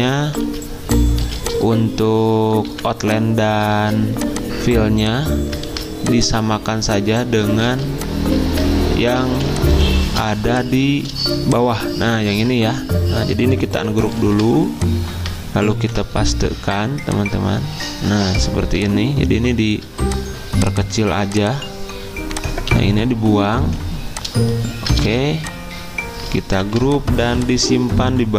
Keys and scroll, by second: 0.4 ctrl+z, 1.2 z, 2.7 v, 3.7 ctrl+z, 5.6 ctrl+z, 7.5 ctrl+z, 9.1 ctrl+c, 9.7 Escape, 12.4 ctrl+z, 15.8 ctrl+f, 22.7 Delete, 23.6 Escape, 25.0 ctrl+z, 26.6 ctrl+g.